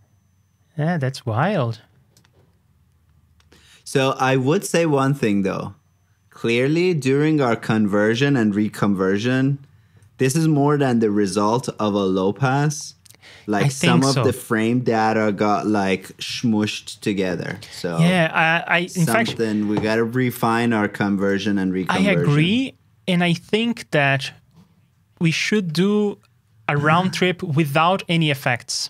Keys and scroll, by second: 11.1 super+s.